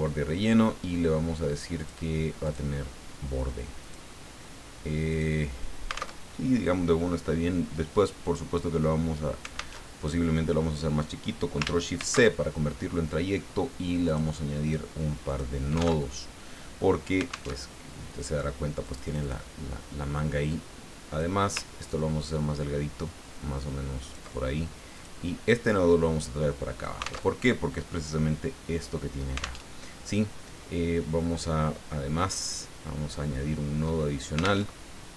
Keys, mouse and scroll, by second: 1.8 click, 2.4 click, 3.8 click, 5.1 click, 6.3 alt+Tab, 9.8 alt+Tab, 12.0 ctrl+shift+c, 14.0 click, 15.2 click, 16.0 alt+Tab, 17.5 alt+Tab, 18.8 click, 20.5-21.5 drag, 21.8-24.4 ctrl+drag, 24.9 click, 25.6-27.2 drag, 27.4 alt+Tab, 29.6 alt+Tab, 32.2 click, 34.6 alt+Tab.